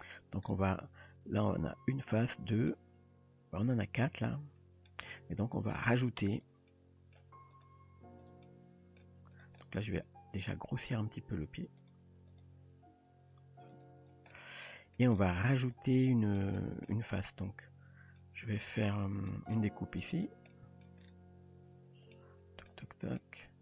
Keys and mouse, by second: 2.7-4.9 middle drag, 6.3 click, 6.7-7.2 middle drag, 7.5 click, 8.2 click, 8.5-9.0 middle drag, 9.6-10.9 middle drag, 11.2 g, 12.4 click, 12.9 g, 14.3-15.0 middle drag, 16.1 middle drag, 16.6 shift+middle drag, 18.2-18.6 middle drag, 19.3 middle drag, 20.5-20.8 middle drag, 22.2-22.7 middle drag, 23.2-23.6 middle drag.